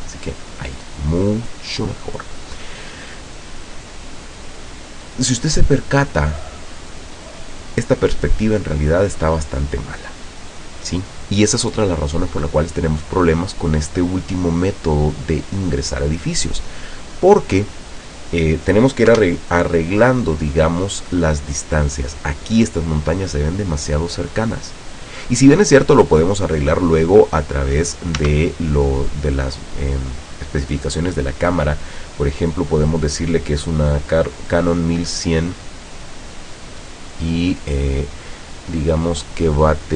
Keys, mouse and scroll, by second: 3.3 scroll down 1, 3.7 middle click, 4.5 scroll down 1, 4.7 scroll up 2, 4.9 middle click, 6.2 scroll up 2, 19.3 KP_0, 20.4-20.9 scroll up 2, 21.0 scroll up 2, 21.8 scroll up 2, 28.2 Tab, 29.1 right click, 30.5 click, 32.3 click, 34.9 click.